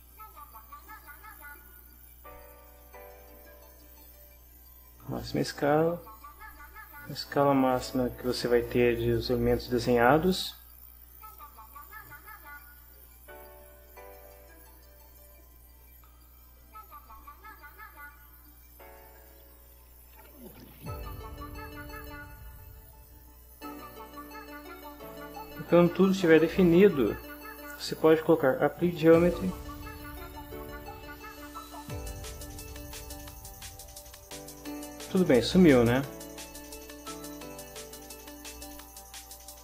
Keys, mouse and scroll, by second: 0.8 click, 4.0-6.4 drag, 7.7 click, 9.5 middle click, 9.7-11.3 drag, 12.8-20.8 right drag, 20.9 scroll down 2, 21.7-23.3 drag, 24.5 shift+middle click, 25.6-26.3 shift+scroll up 3, 29.8 click, 33.3-36.7 drag.